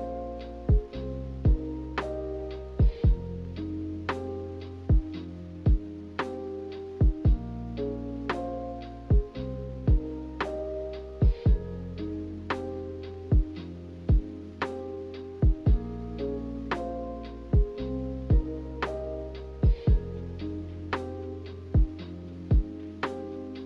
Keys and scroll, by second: 14.3 z.